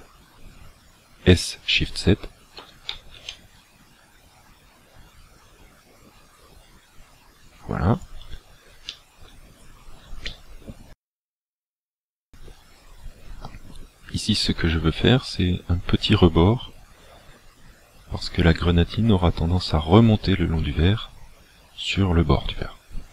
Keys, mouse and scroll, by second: 2.6 s, 8.1 shift+click, 8.9 shift+middle click, 9.5 scroll up 4, 10.3 shift+middle click, 12.2 shift+middle click, 12.9-13.6 scroll up 2, 13.6 scroll up 1.